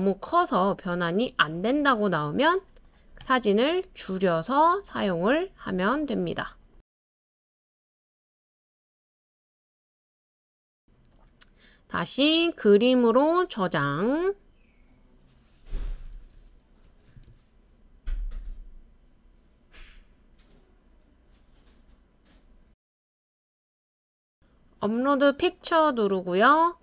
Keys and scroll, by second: 19.6-21.6 typing.